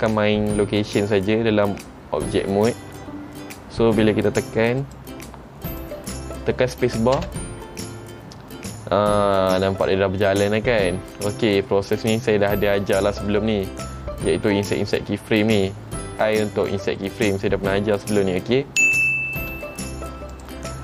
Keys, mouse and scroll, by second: 5.0 click, 5.9 click, 7.3 space, 8.9 middle click, 13.7 middle click, 16.2 middle click, 19.6 space, 20.5 click.